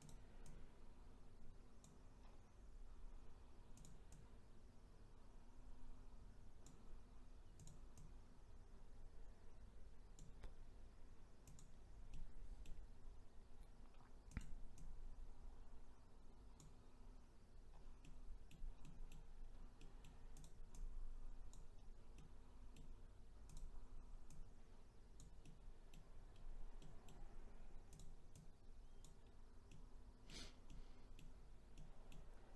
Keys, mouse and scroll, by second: 0.1 click, 0.5 click, 2.2-2.5 scroll down 1, 2.7-3.2 scroll up 2, 3.8 click, 4.2 click, 7.7 click, 8.0 click, 11.6 click, 12.1-14.4 middle drag, 14.4 click, 14.8 click, 17.0-17.7 scroll up 1, 17.7 scroll down 4, 18.0 middle click, 18.7 scroll down 1, 18.8 middle click, 19.4-19.8 scroll up 2, 19.8 middle click, 20.4 click, 20.8 click, 21.7-22.2 scroll down 1, 22.2-23.5 middle drag, 23.5 click, 24.4 click, 25.5 middle click, 26.3-26.8 scroll up 2, 26.8 middle click, 27.2-28.0 scroll up 1, 28.0 click, 28.4 click, 29.3-29.7 scroll down 1, 29.7-32.5 middle drag.